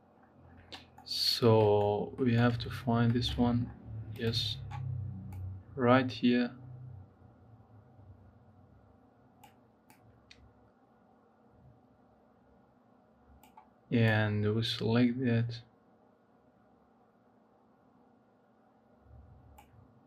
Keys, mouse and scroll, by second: 0.7-2.4 shift+middle drag, 2.4-2.9 scroll up 2, 2.9 shift+middle click, 3.2-3.9 scroll up 6, 3.9 click.